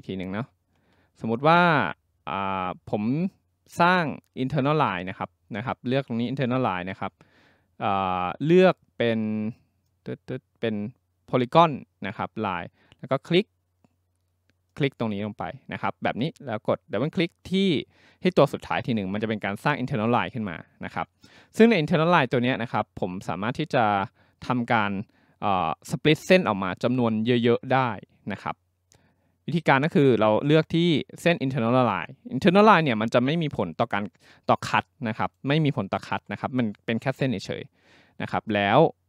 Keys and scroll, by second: 0.3 ctrl+z, 0.8 ctrl+z.